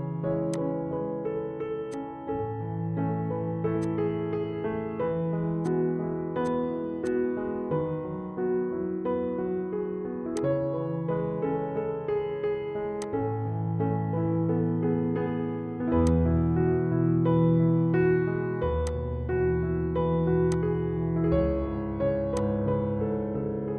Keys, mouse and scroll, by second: 3.3-4.0 typing, 3.8-5.4 drag, 5.7-8.7 drag, 5.7-6.5 typing, 9.1 scroll down 1, 9.1-10.0 typing, 10.6 click, 13.1 click, 14.4 F4, 16.2 click, 18.9 click.